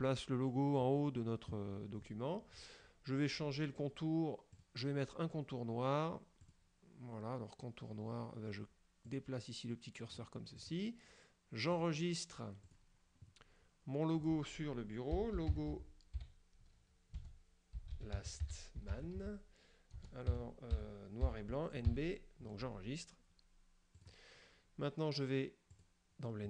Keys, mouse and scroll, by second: 4.6 click, 6.5 click, 9.1-10.4 drag, 10.7 click, 11.8 click, 12.7 click, 15.0-21.4 typing, 24.1 click, 25.9 click.